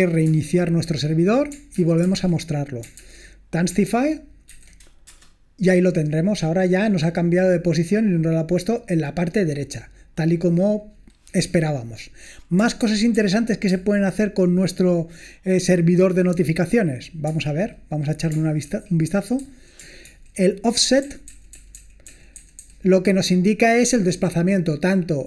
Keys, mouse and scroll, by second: 0.3 Return, 1.8 ctrl+p, 2.0 ctrl+p, 3.1 ctrl+p, 3.9 ctrl+p, 4.5 ctrl+n, 5.1 Return, 9.5 click, 10.1 click, 12.8 ctrl+p, 13.2 ctrl+p, 13.7 ctrl+p, 17.4 Return, 18.6 ctrl+d, 19.4 j, 20.0 ctrl+d, 20.8-22.6 typing.